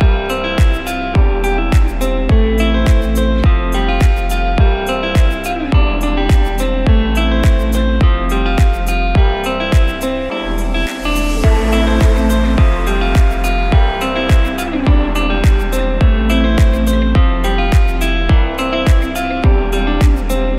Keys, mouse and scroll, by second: 1.0 click, 2.4 click, 3.0-3.8 scroll down 4, 3.8 click, 3.8 scroll down 3, 4.3 click, 5.6 KP_1, 6.5-7.3 scroll up 4, 7.4 click, 9.5 shift+super+a, 10.1 shift+super+a, 12.9 shift+a, 15.5 click, 16.6 click, 17.3 Tab, 18.2 ctrl+r.